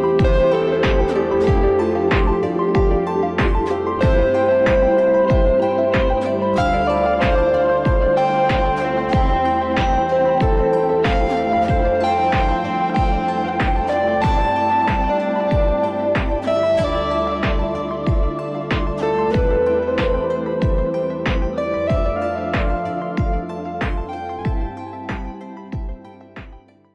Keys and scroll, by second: 17.2 Escape.